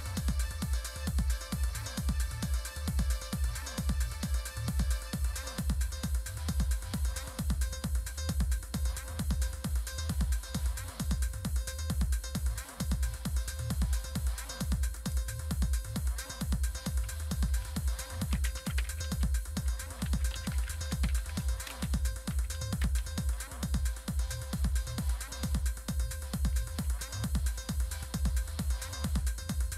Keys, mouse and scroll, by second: 15.0 click, 18.1-22.8 typing.